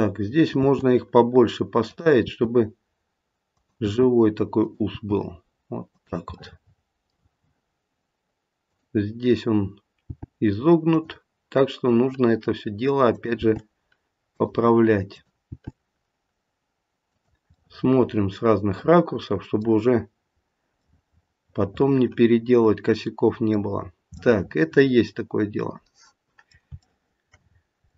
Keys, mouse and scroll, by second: 0.6 e, 2.2 e, 4.9 e, 6.3 middle click, 8.6 click, 10.0 g, 13.1 click, 13.3 g, 15.0 click, 15.4 g, 17.6 middle click, 18.1 middle click, 20.2-20.8 scroll up 1, 20.8 middle click, 23.8-24.2 scroll down 2, 24.2 middle click, 24.5 middle click, 26.8 middle click, 27.4-27.9 scroll up 2, 27.8 middle click.